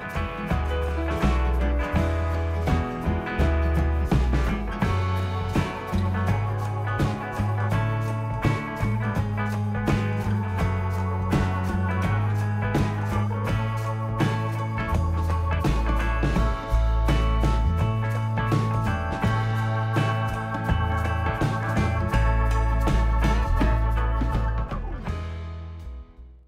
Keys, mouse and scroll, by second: 1.8 click, 3.8 click, 4.3 click, 5.7 click, 7.3 click, 7.9 click, 8.8 click, 10.5 click, 15.1 click, 17.1 click, 17.7 middle click, 18.3 click, 19.2 middle click, 19.6 click, 23.6 click, 24.9 click.